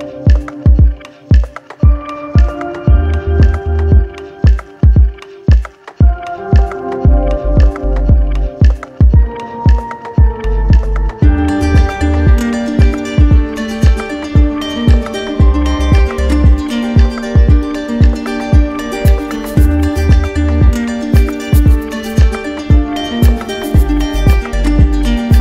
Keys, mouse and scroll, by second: 2.0 alt+click, 3.2 shift+click, 3.7 shift+click, 4.2 shift+click, 4.7 shift+click, 5.0 shift+click, 5.8 click, 7.6 shift+click, 8.5 alt+right click, 9.4 alt+right click, 10.8 alt+right click, 11.4 right click, 12.0 alt+right click, 12.2 alt+right click, 12.7 right click, 14.5 alt+right click, 16.6 alt+right click, 22.7 right click, 23.8 click, 24.4 shift+click.